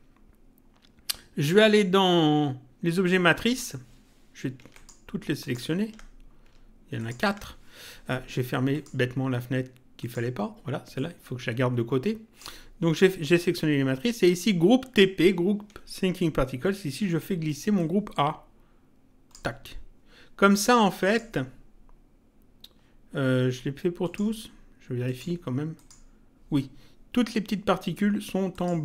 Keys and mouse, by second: 3.4 click, 4.7 ctrl+click, 7.0 ctrl+click, 8.7 click, 10.0 click, 17.7 click, 21.0 click, 24.0 click, 28.5 click.